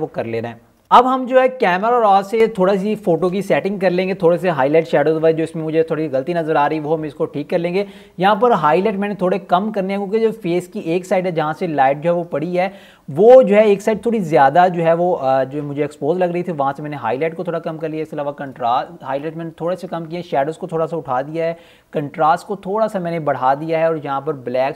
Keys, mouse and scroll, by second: 0.1 ctrl+alt+scroll down 1, 7.4 click.